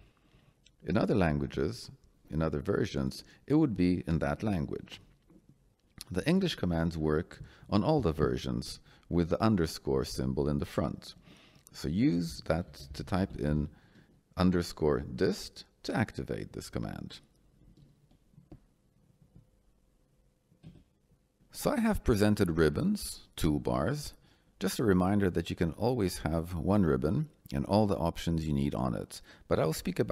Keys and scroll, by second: 1.2 Return, 7.9 shift+-, 12.6 d, 12.8 i, 20.6 Escape.